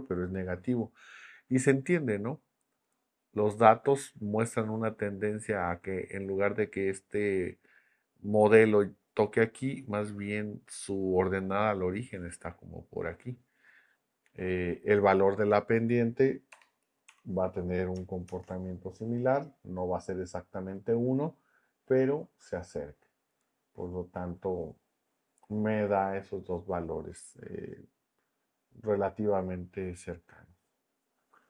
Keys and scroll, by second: 16.5 BackSpace, 17.1 1, 18.2 shift+Return.